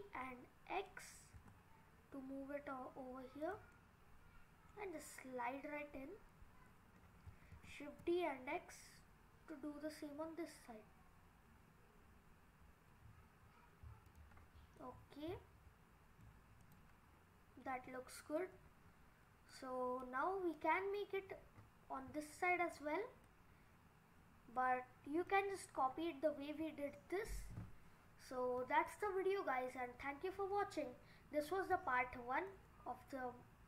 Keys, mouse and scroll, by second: 3.7 middle click, 7.6 shift+d, 14.4-14.8 scroll down 5, 14.8 middle click, 16.6 click, 17.1-17.7 scroll up 6, 18.1 scroll down 1, 18.4 middle click, 19.5 middle click, 21.3 scroll up 3, 22.6 scroll down 3, 23.2 scroll up 1, 23.3 middle click, 24.6 scroll down 2, 25.3 middle click, 27.5 scroll up 2, 28.3-28.9 scroll up 3, 28.9 middle click, 29.0-29.8 scroll down 1, 29.8-31.4 scroll down 5, 31.7 Tab, 32.1 scroll up 4, 32.5 middle click.